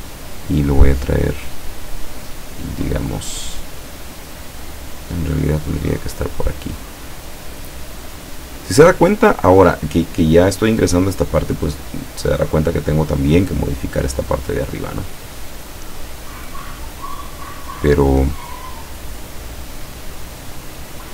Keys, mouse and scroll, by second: 7.2-9.0 drag, 19.2 click.